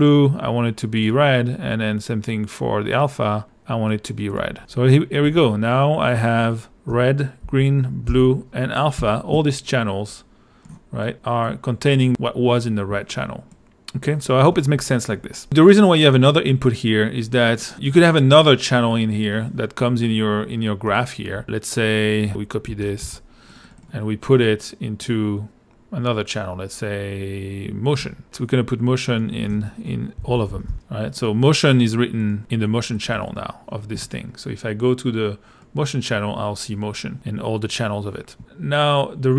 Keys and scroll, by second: 5.2 l, 6.9 r, 7.4 g, 8.1 b, 9.0 a, 22.3 Escape, 22.7 super+c, 23.0 super+v, 29.9-31.2 typing, 33.1 i.